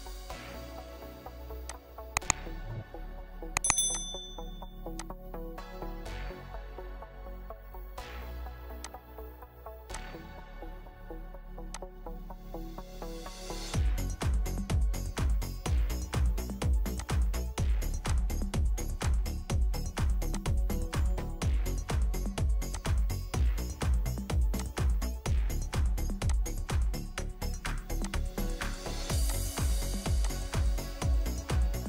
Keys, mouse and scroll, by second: 0.2-4.0 scroll up 1, 6.0 4, 6.8 Return, 30.6 Return, 31.3 scroll up 1, 31.4 middle click.